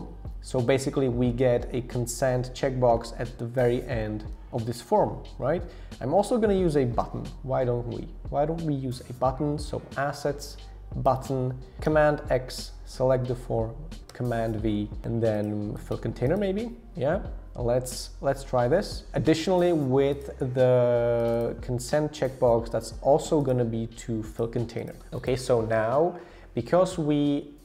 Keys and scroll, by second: 11.9 super+x, 14.1 super+v.